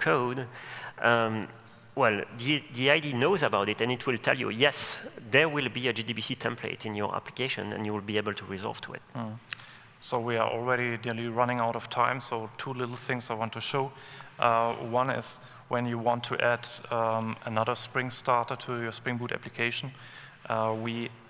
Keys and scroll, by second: 4.0 super+1.